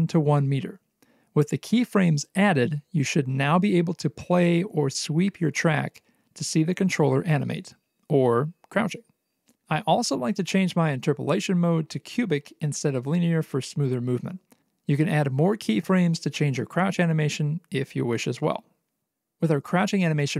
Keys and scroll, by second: 3.1 Return, 10.0 alt+x, 19.3 alt+x.